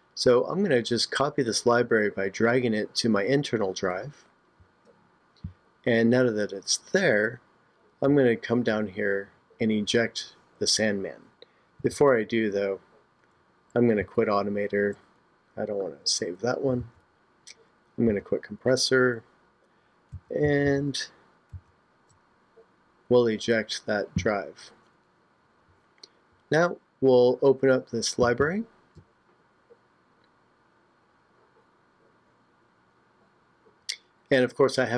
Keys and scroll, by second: 11.9 super+Tab, 14.0 super+q, 16.8 super+Tab, 18.1 super+q, 20.1 super+Tab.